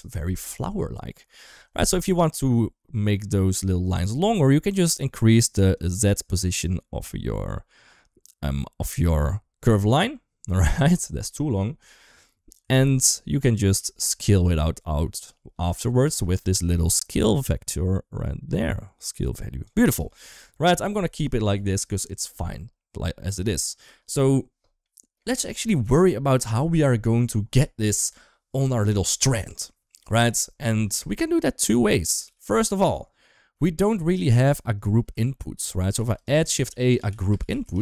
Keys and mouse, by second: 2.2 middle click, 5.6-12.4 drag, 12.7 ctrl+z, 13.7 middle click, 13.9 ctrl+s, 14.4 middle click, 15.7 middle click, 16.2 middle click, 17.2-19.4 drag, 19.7 middle drag, 20.1 ctrl+s, 20.8 middle click, 23.7 middle click, 24.6-25.0 middle drag, 25.6-26.9 middle drag, 30.7 ctrl+s, 31.5 KP_1, 32.0 KP_3, 33.5 shift+middle click, 35.1 ctrl+s, 35.8 shift+a.